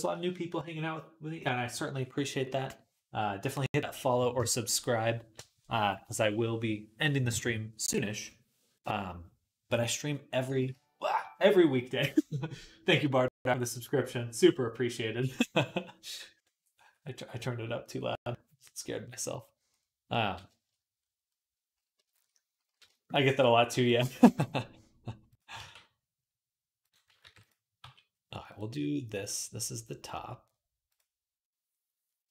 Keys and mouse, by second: 24.0 g, 25.4 e, 27.0 ctrl+r, 27.6 g, 30.7 click, 30.8-32.3 middle drag.